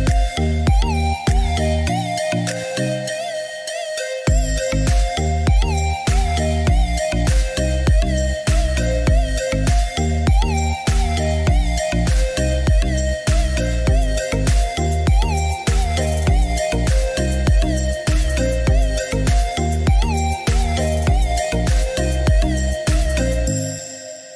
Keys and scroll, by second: 16.2 6, 16.8 8, 17.3 Return, 19.1 Escape.